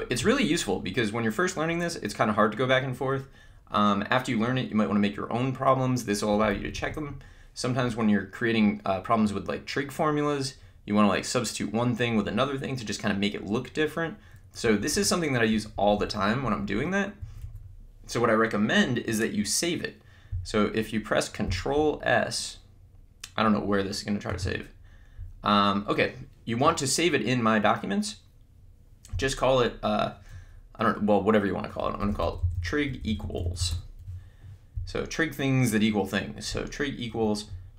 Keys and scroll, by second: 6.3 Down, 15.5 Up, 17.2 Down, 24.2 ctrl+s, 32.4-34.1 typing.